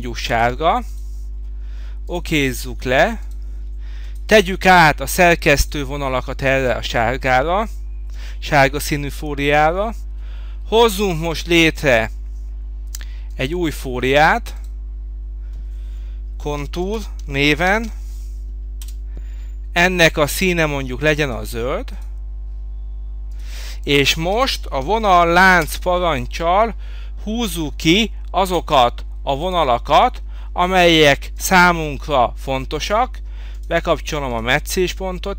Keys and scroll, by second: 18.8 Return, 23.8 Escape, 24.8 v, 25.6 Return.